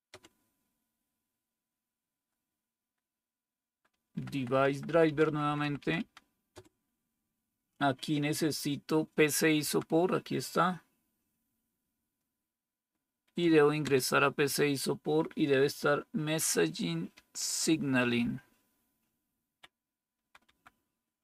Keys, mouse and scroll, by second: 0.0 Return, 3.7 Down, 4.2 Down, 4.4 Down, 4.6 Down, 5.0 Down, 5.1 Down, 5.3 Down, 5.5 Down, 5.7 Down, 5.9 Down, 6.4 Return, 9.5 Down, 13.7 Return, 17.0 Down, 17.7 Down, 17.8 Down, 18.0-19.4 Down, 20.0 Down, 20.3 Down.